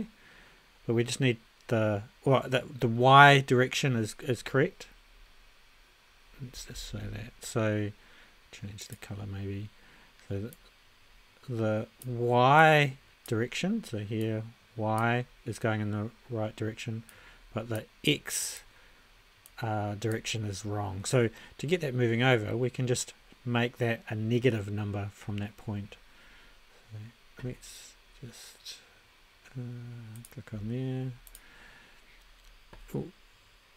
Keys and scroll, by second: 6.7 ctrl+a.